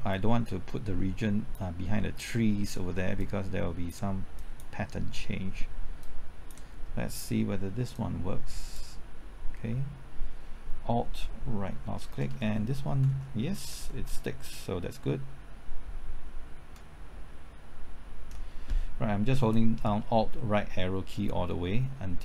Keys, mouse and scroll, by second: 5.2-6.0 scroll down 1, 6.0-9.4 drag, 11.6 alt+Right, 12.1 alt+Right, 12.3 alt+Right, 12.4 alt+Right, 12.5 alt+Right, 16.9 alt+Right, 18.3 alt+Right, 19.5-22.2 drag.